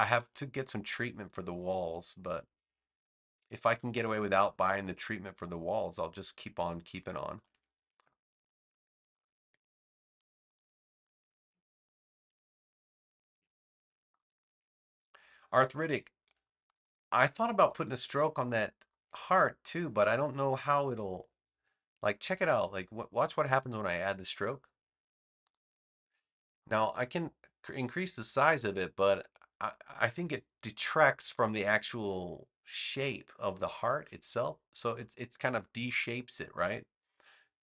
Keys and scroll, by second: 7.3 space, 13.3 super+g, 14.2 space, 33.8 super+z.